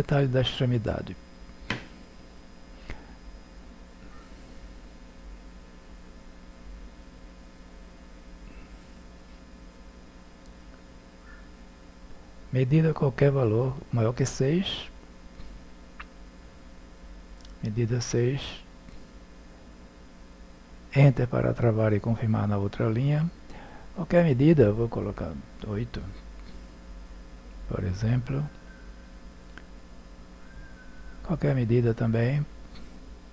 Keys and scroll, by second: 19.1 6, 20.7 Return, 27.4 5, 29.0 BackSpace, 30.2 8.